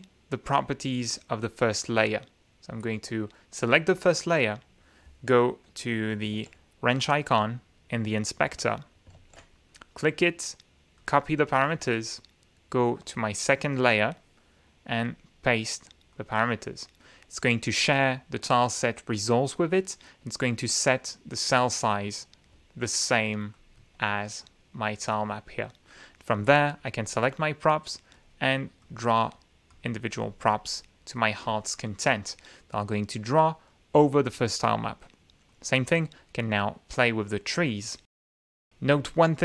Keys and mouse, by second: 0.5 click, 1.2 click, 6.3 F9, 7.1 click, 8.5 F9, 9.6 shift+click, 10.9 click, 13.0 click, 15.0 click, 16.1 click, 17.6 click, 20.5 click, 23.5 click, 24.4 click, 25.0 click, 26.3 click, 28.1 click, 28.8 click, 29.6 click, 30.4 click, 31.1 middle click, 35.4 click, 36.9 click, 38.4 ctrl+z.